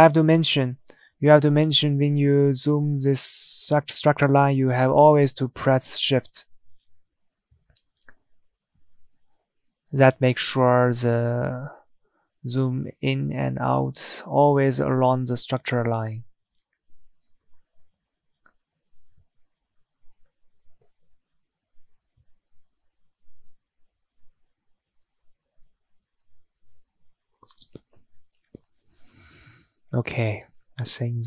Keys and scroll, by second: 2.3 Tab, 9.4 Tab.